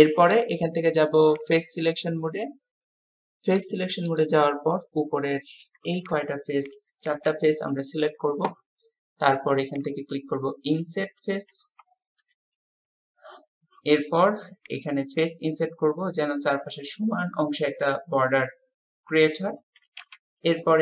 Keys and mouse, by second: 4.3 click, 4.9-5.7 drag, 6.1-7.3 shift+drag, 11.1-11.6 middle drag, 11.8-12.3 shift+middle drag, 17.7 click.